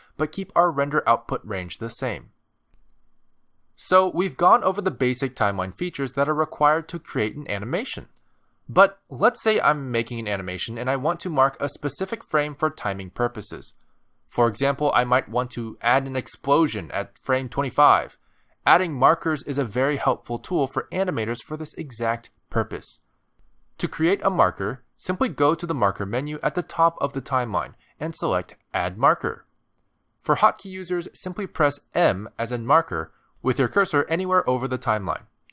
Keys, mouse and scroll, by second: 12.8 space, 14.0 click, 14.9 click, 16.0 click, 18.0 click, 20.4 click, 23.7 middle click, 27.8 click, 28.0 click.